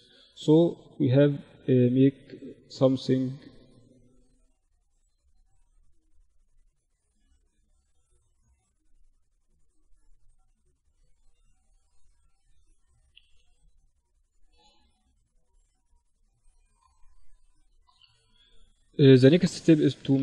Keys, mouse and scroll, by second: 6.0-8.0 drag, 7.4 right click, 8.0-10.2 middle drag, 10.2 KP_1, 12.7 click, 13.2 click, 13.7-15.6 middle drag, 17.2-20.2 drag.